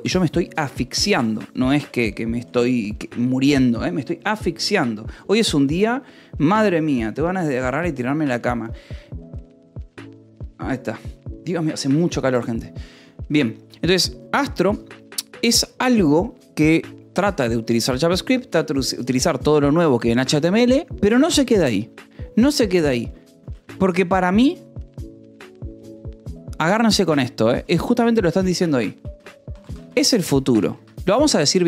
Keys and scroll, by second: 23.0 Escape, 23.4 shift+;, 23.5 space, 29.2-31.0 typing.